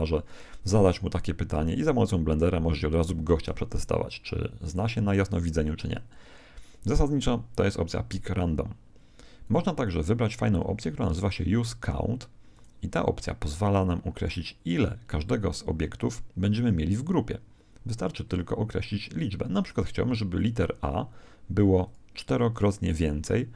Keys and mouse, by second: 8.0-10.3 middle drag, 9.4 click, 12.5 click, 17.7-20.3 middle drag, 20.3-23.5 drag.